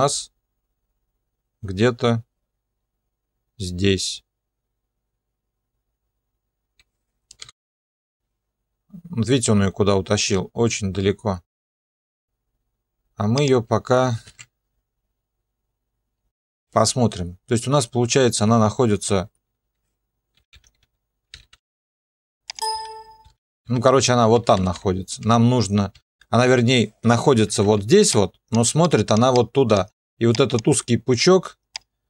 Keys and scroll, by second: 7.4 p, 14.1 0, 14.3 Return, 20.4-25.9 typing, 27.5 ctrl+2.